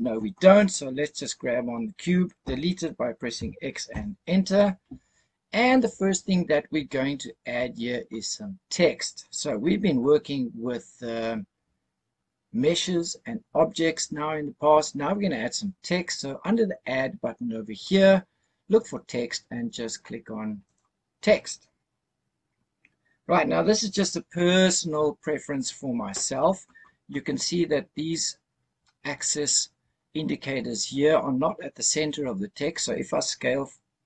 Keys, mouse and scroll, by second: 1.0 click, 3.3 x, 17.7-20.8 drag.